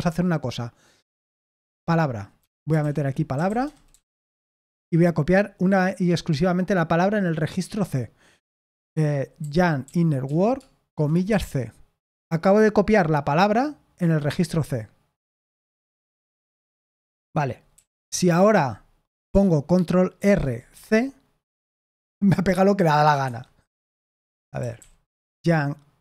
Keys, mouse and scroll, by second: 2.1-4.5 typing, 9.1-11.2 typing, 17.7 typing, 18.0 Return, 20.1 ctrl+r, 20.7 c, 23.2 Escape, 24.3-24.7 typing.